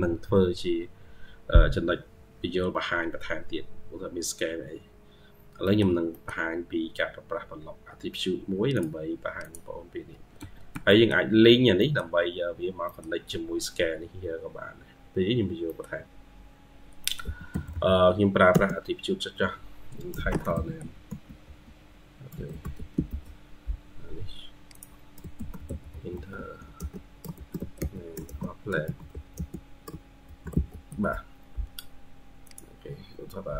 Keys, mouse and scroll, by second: 0.0 Escape, 1.1-2.1 scroll down 1, 2.3-3.4 scroll up 2, 5.3-5.6 scroll down 3, 6.0 middle click, 6.8-7.8 scroll up 1, 10.2 Escape, 10.6 scroll down 1, 10.8 middle click, 11.3-11.6 scroll down 1, 11.6 middle click, 12.1-12.6 scroll down 5, 12.7 middle click, 14.0-15.5 scroll up 12, 15.5 middle click, 16.9 middle click, 17.1 typing, 20.4-23.4 typing, 25.2 typing, 27.2 typing, 31.8 scroll up 1, 32.0 typing.